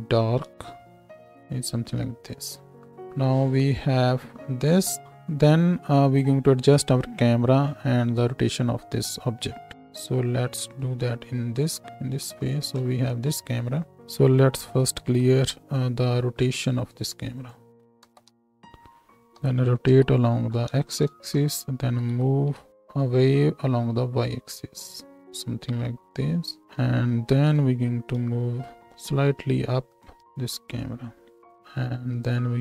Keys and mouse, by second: 5.0-9.7 middle drag, 9.7 right click, 10.6 middle click, 10.7-12.0 right drag, 12.8 KP_0, 14.6 alt+r, 14.9 alt+g, 17.9 alt+r, 18.2 alt+g, 19.4 r, 20.6 middle click, 21.8 g, 26.6-27.5 drag, 27.5 n, 31.2-32.6 drag.